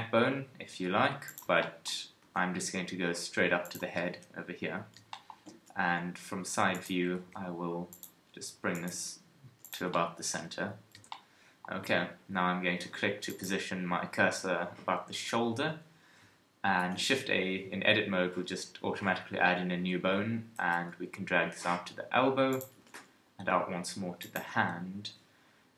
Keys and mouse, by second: 2.2 g, 3.6-5.1 drag, 4.1 KP_1, 5.6 KP_3, 7.2 g, 8.9 g, 10.4 KP_1, 16.8 shift+a, 20.6 g, 22.7 e.